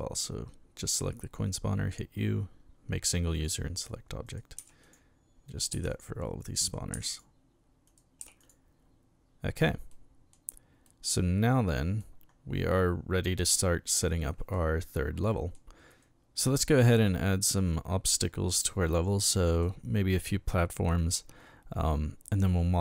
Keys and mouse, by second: 3.3 click, 4.2 right click, 4.6 u, 4.8 click, 5.5 right click, 5.7 u, 5.9 click, 6.6 right click, 6.9 u, 7.1 click, 7.8 right click, 8.2 u, 8.4 click, 9.9-10.3 middle drag, 10.8-12.0 middle drag, 14.1 middle click, 15.3 middle click, 15.9 right click, 16.8-19.6 middle drag.